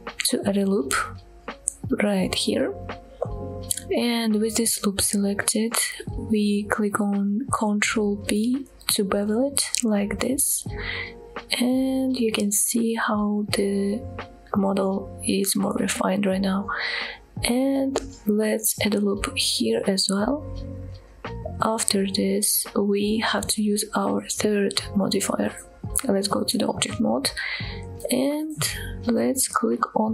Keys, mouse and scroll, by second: 2.2 right click, 2.6 scroll up 1, 3.5 shift+middle click, 8.6 ctrl+b, 14.0 click, 14.6-15.0 scroll down 2, 15.0 shift+middle click, 15.4-15.7 scroll up 2, 15.9 shift+middle click, 16.6 click, 18.7 ctrl+r, 19.9 right click, 20.7 scroll down 1, 22.1 click, 22.9 Tab, 23.7 Tab, 25.2-25.5 scroll down 2, 25.5-26.3 middle drag, 26.6 shift+middle drag, 27.1-27.9 scroll up 2.